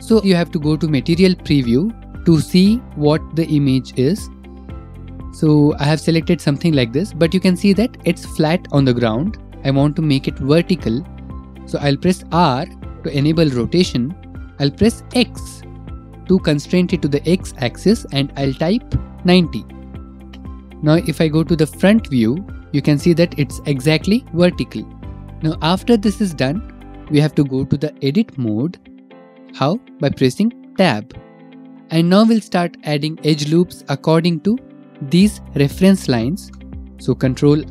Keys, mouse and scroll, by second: 1.2 scroll, 2.4 click, 2.6 middle click, 3.6 middle click, 3.7 middle click, 4.1 middle click, 5.9 middle click, 7.6 middle click, 7.9 middle click, 9.2 middle click, 12.4 r, 15.2 x, 19.5 typing, 20.4 Return, 20.4 scroll, 21.9 click, 22.5 middle click, 22.5 middle click, 23.0 middle click, 23.6 middle click, 30.8 Tab, 31.8 click, 37.1-37.7 drag.